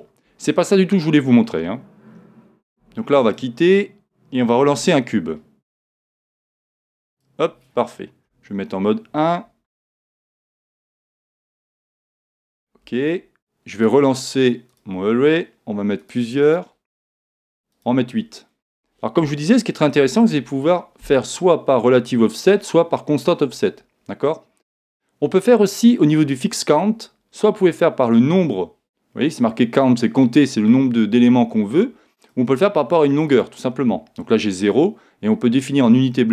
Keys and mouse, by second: 2.8 x, 4.6 shift+a, 6.4 shift+a, 8.2 KP_1, 10.2-11.4 middle drag, 13.8 click, 19.3-21.2 middle drag, 25.8 click, 33.9 click, 34.7 click.